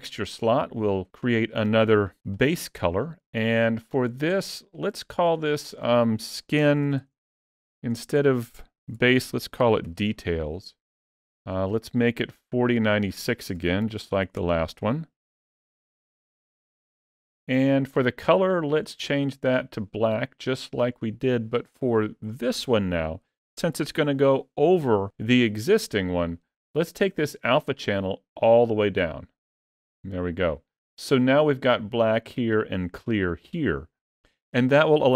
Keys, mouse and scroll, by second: 6.5-7.5 typing.